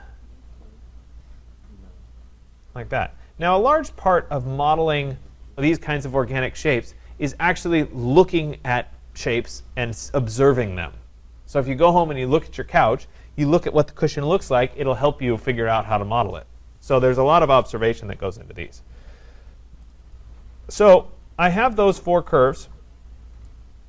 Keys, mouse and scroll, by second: 4.4 click, 5.0 click, 19.9 click, 20.1 click, 22.5 click, 22.7 click, 23.1-23.5 scroll.